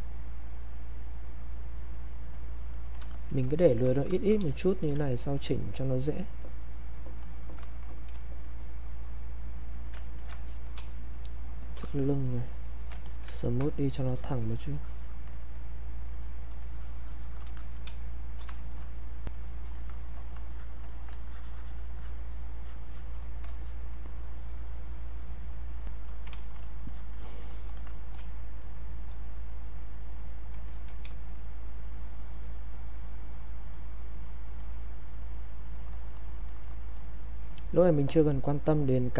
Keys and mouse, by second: 3.1 alt+click, 3.6 ctrl+right click, 3.9 click, 4.5 alt+click, 5.0 ctrl+right click, 6.2 click, 8.1 space, 8.4 click, 10.0 ctrl+right click, 10.5 alt+click, 10.8 space, 11.2 click, 11.3 space, 11.9 shift+click, 13.4 ctrl+alt+right click, 13.7-16.6 ctrl+drag, 16.6 shift+click, 17.9 space, 18.3 click, 21.3 shift+click, 23.6 shift+click, 25.8 click, 26.4 alt+click, 28.2 space, 28.6 click, 28.7 space, 29.2 click, 30.7 alt+click, 31.1 space, 31.6 click, 32.6 click, 36.5 click.